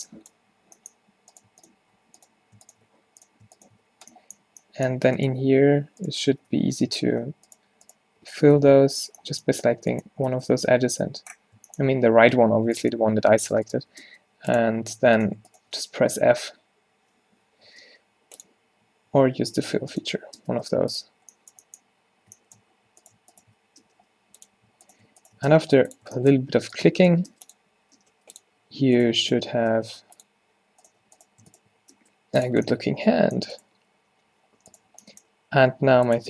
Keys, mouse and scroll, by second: 0.0 f, 0.5 f, 3.0 f, 3.9 f, 5.5 f, 6.4 f, 6.6-8.6 f, 10.4 f, 10.5 f, 11.1 f, 14.1 space, 16.5 f, 17.5 ctrl+z, 17.9 space, 20.5 space, 27.4 space, 28.0 space, 32.0 space, 35.5 g.